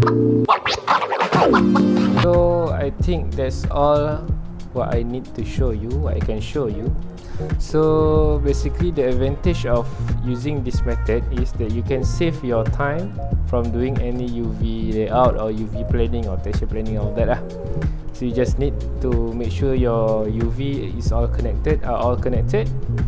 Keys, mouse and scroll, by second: 0.4-0.8 scroll down 2, 0.5 middle click, 0.8-1.9 middle drag, 1.9 ctrl+alt+click, 2.6 middle click, 2.9-3.4 scroll up 1, 3.8 click, 4.7-5.9 middle drag, 5.9 x, 6.1-7.8 drag, 7.8 middle click, 8.1 x, 8.4-10.1 drag, 10.1 middle click, 11.1 x, 11.3-18.1 drag, 18.1 middle click, 18.6-20.4 ctrl+alt+drag, 20.4 scroll down 1, 20.5 middle click, 21.1 scroll up 1, 21.6 middle click, 22.0 ctrl+alt+click, 22.8 scroll down 1, 22.8 middle click.